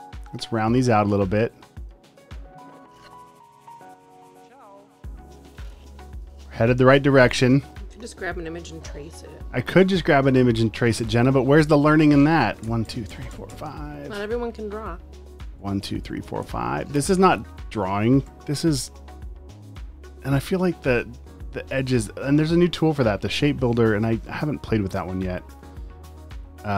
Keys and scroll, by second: 8.7 a, 11.0 shift+Left, 12.0 super+z, 12.6 Left, 15.6 Right, 18.3 typing, 20.1 typing.